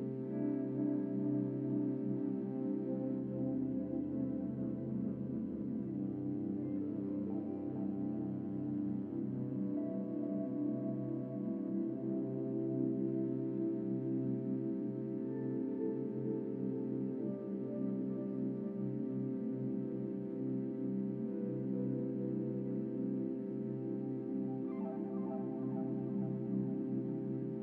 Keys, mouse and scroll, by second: 4.9-5.9 scroll down 3, 5.9 Tab, 7.0 a, 8.2 click, 8.9 Tab, 9.5 a, 10.3 a, 12.2-13.3 drag, 13.3-14.2 right drag, 14.2-15.8 drag, 16.7 click, 18.0-20.2 drag, 20.7 Tab, 21.5-23.2 drag, 24.9 Tab.